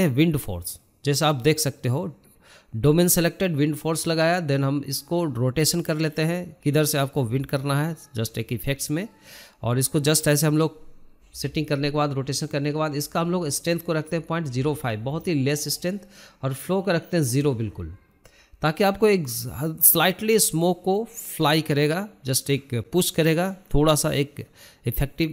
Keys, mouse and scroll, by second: 0.5 KP_1, 2.1 g, 6.7-7.5 scroll down 5, 7.5 scroll up 3, 7.9 shift+middle drag, 8.2 scroll down 1, 8.4 shift+middle drag, 8.6-8.9 scroll up 4, 9.1-10.9 shift+middle drag, 11.9-13.8 drag, 14.9 click, 15.5 KP_0, 16.8-20.4 drag, 20.4-21.2 middle drag, 21.2 KP_0, 21.8-22.5 scroll down 4, 22.5-23.8 scroll up 4, 23.8 scroll up 1, 24.4-25.3 middle drag.